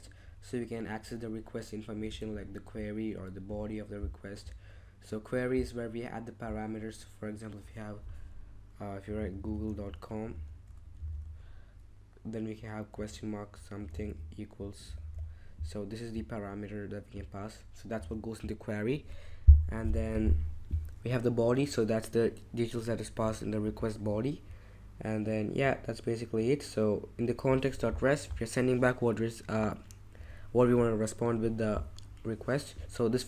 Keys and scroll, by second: 8.8-11.7 typing, 12.9-15.6 typing, 18.0 super+w.